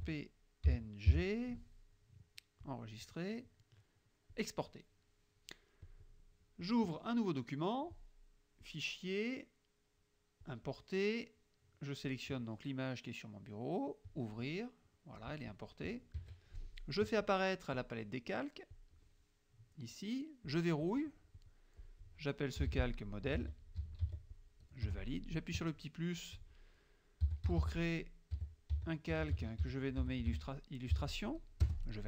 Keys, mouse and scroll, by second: 0.0-1.1 typing, 2.7 click, 4.4 click, 6.0 click, 6.7 click, 8.7 click, 10.5 click, 12.1 click, 14.2 click, 15.3 click, 16.3 KP_Subtract, 17.9 click, 18.8 click, 20.5 click, 20.9 click, 21.5 click, 22.7-24.6 typing, 24.9 Return, 25.4 click, 27.0-30.8 typing, 31.7 Return.